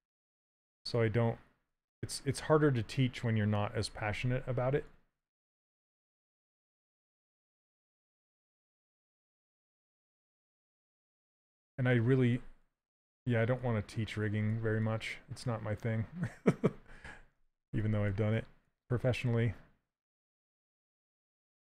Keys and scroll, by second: 0.5 s, 4.5 s, 11.1 s.